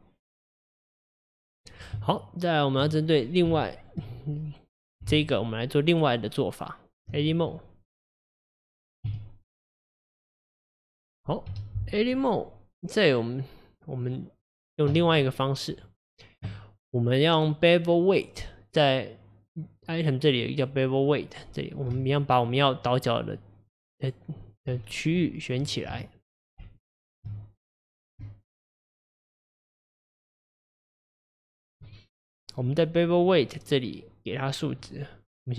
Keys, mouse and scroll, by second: 2.0 Tab, 3.1 click, 3.6-5.0 shift+middle drag, 5.0 Tab, 5.6 Tab, 5.8 Tab, 7.6-9.1 middle drag, 9.1 a, 10.1-11.5 drag, 11.5 KP_Divide, 12.2 scroll down 4, 14.1 click, 14.4 click, 15.2 middle click, 15.8 click, 17.4 click, 22.0 shift+click, 22.4 shift+click, 22.8 shift+click, 23.2 shift+click, 23.6 shift+click, 24.0 shift+click, 24.4 shift+click, 26.1 shift+click, 26.8 alt+shift+click, 27.4-28.8 middle drag, 28.8 shift+click, 29.8 shift+click, 30.4 shift+click, 30.8 shift+click, 31.2 shift+click, 31.6 shift+click, 32.0-35.0 middle drag.